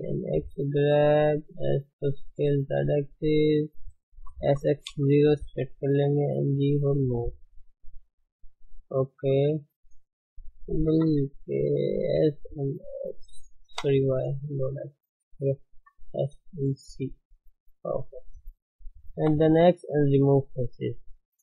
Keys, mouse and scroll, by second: 1.5 s, 4.2 s, 6.2 g, 8.2 r, 9.0-10.0 middle drag, 10.0 s, 11.0 KP_3, 12.2 s, 14.9 s, 15.8 s, 17.8 g, 19.8 x, 20.1-21.4 middle drag.